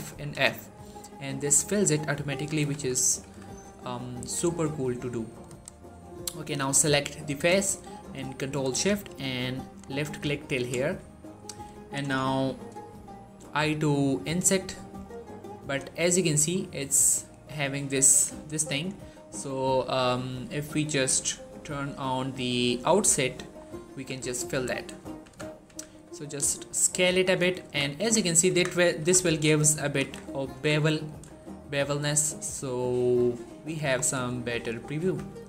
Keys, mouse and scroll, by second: 0.0-0.2 typing, 0.7 middle click, 2.2-3.6 typing, 3.9-4.4 shift+middle drag, 5.4 click, 9.7 ctrl+shift+Num_Lock, 9.7 ctrl+shift+click, 10.7-11.3 middle click, 13.4 i, 15.4 click, 16.2 scroll up 1, 16.4 middle click, 18.6 click, 24.4-26.1 typing, 27.1 click, 27.4 z, 27.9 Tab, 28.0 middle click, 28.4 Tab, 28.8 g, 29.1 x, 29.7 click, 29.9 Tab, 30.0 scroll down 1, 30.2 middle click, 30.4 1, 31.1 shift+middle click, 31.7 shift+scroll up 1, 32.4-32.7 scroll up 1, 32.7-33.5 middle click, 33.6 1, 33.8 scroll up 1, 34.2 shift+middle click, 34.4 scroll up 1, 34.6 Tab, 34.9 z, 35.2 click.